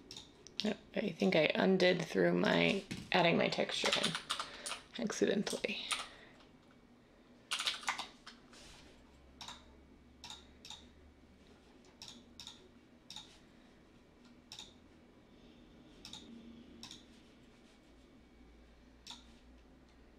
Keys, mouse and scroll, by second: 3.8-7.9 typing.